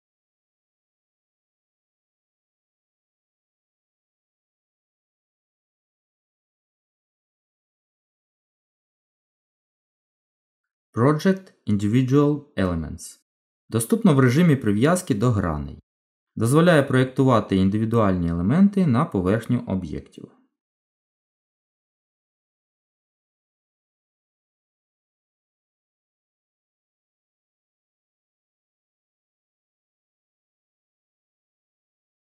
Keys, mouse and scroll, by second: 1.7 middle click, 2.8-3.8 scroll up 1, 3.9 shift+middle click, 6.2 click, 15.4 click, 17.5 Tab, 18.9 middle click, 23.6 g, 28.1 middle click, 29.7-30.1 scroll up 1, 30.1 middle click.